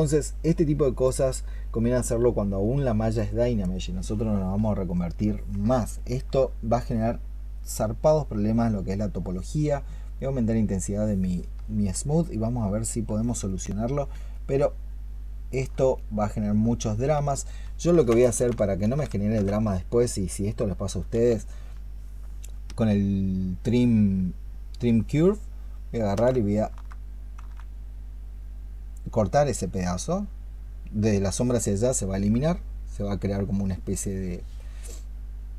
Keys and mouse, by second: 5.8 alt+click, 6.8 alt+click, 7.4 shift+click, 8.8 shift+click, 10.1 shift+click, 12.1 shift+click, 14.4 shift+click, 15.3 shift+click, 17.8 ctrl+Caps_Lock, 24.7 ctrl+shift+click, 25.9 ctrl+shift+click.